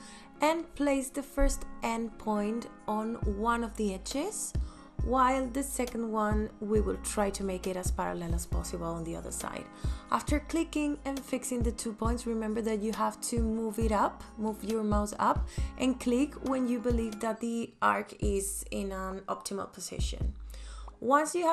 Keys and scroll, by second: 14.9 v, 16.1 space.